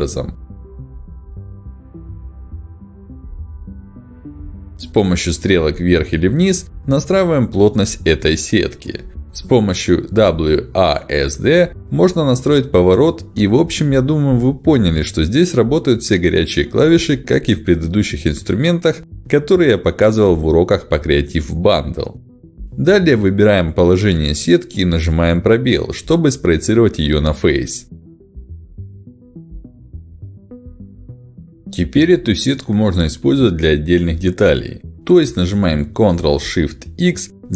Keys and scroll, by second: 4.7 Up, 5.8 Down, 8.0 Up, 9.5 Down, 10.6-13.1 typing, 14.3 s, 25.6 space, 34.2 Page_Up, 36.6 ctrl+shift+x.